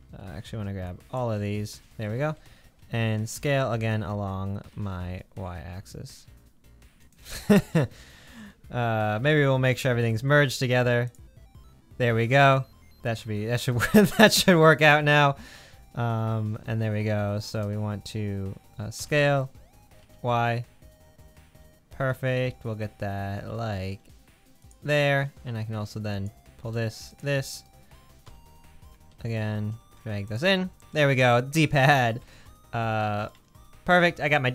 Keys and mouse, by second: 0.3 alt+z, 0.9-1.9 shift+drag, 2.2 alt+z, 3.4 s, 6.9-9.2 drag, 9.2 a, 10.0 m, 13.7 alt+z, 14.5-16.7 drag, 19.0 s, 21.6-22.9 drag, 23.1-24.7 drag, 26.1 click, 27.1 shift+click, 28.2 s, 30.5 Tab, 32.0 alt+z.